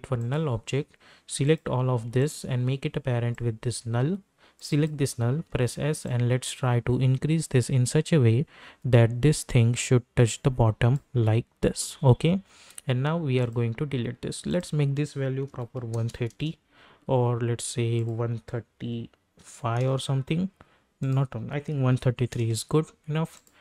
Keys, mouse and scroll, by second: 2.2-4.7 shift+drag, 5.3 s, 6.0-13.2 drag, 13.4 click, 16.3 Return, 17.9 click, 19.8 Return, 21.0 click, 22.4 Return, 23.3 click.